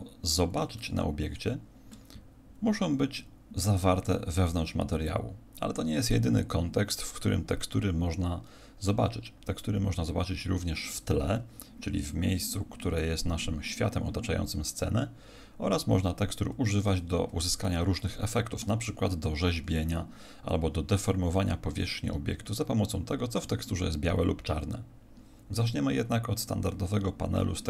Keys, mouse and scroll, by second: 15.9 Escape, 17.6 shift+middle click.